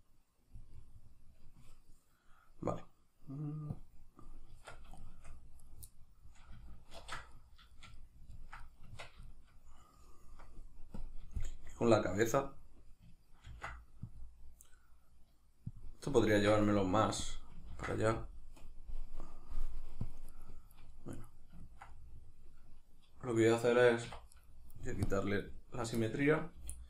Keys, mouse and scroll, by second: 0.8-3.8 middle drag, 3.8 click, 4.2-5.6 middle drag, 4.6 Tab, 5.6 right drag, 5.9-11.0 middle drag, 7.0 ctrl+2, 8.9 Tab, 11.0 click, 11.4-15.8 shift+middle drag, 13.5 ctrl+r, 15.8 click, 16.3 ctrl+r, 17.3 click, 17.7 ctrl+r, 20.4 right click, 21.1 right click, 21.6-24.3 ctrl+middle drag, 24.1 1, 24.3 right drag, 25.1 click, 25.5-26.6 middle drag, 26.6 g.